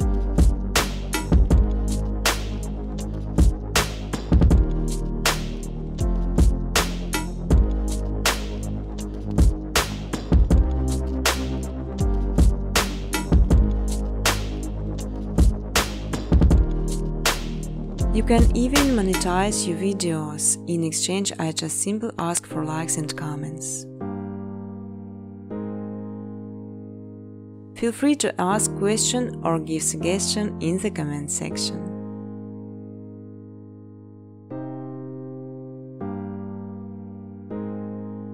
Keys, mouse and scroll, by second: 0.2 click, 0.3 click, 2.8 click, 4.1 click, 4.4-10.0 typing, 12.4 space, 12.9 space, 13.2 space, 13.8 click, 15.9 middle click, 16.0 middle click, 17.0 click, 17.6 0, 18.3 click, 19.3 space, 21.3 space, 21.7 space, 22.5 space, 23.3 click, 25.6 click, 29.1 click, 29.3-30.6 typing, 31.5 click, 31.6 click, 34.2 click, 34.9 0, 35.7 click, 36.3 space.